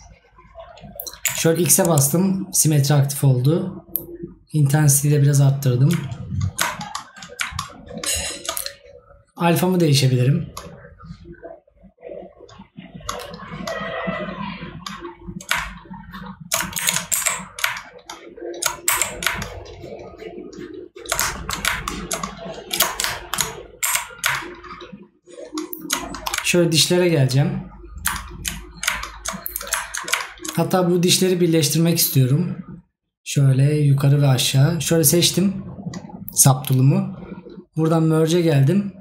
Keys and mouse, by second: 21.4 right click, 23.2 right click.